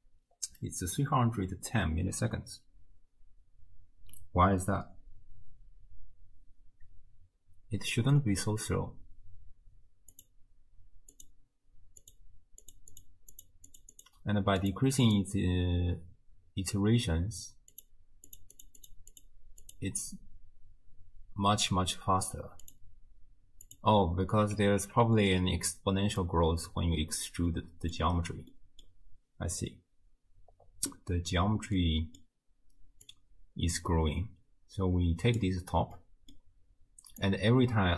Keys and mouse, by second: 10.1 click, 11.2 click, 12.8 click, 13.1 middle click, 13.4 click, 13.5 middle click, 13.7 click, 14.1 middle click, 14.7 click, 15.0 click, 17.9 click, 18.4 click, 18.6 click, 19.1 click, 19.8 click, 22.8 click, 23.7 click, 24.8 Tab, 25.4 click, 27.6 click, 28.6 click, 31.9 click, 33.3-35.6 middle drag, 36.0 click, 37.4 middle click.